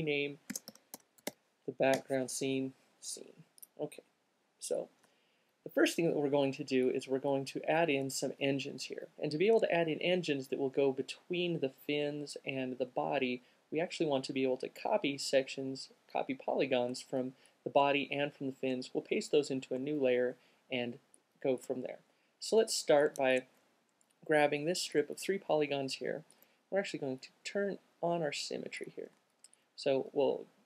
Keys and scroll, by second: 0.5-3.5 typing.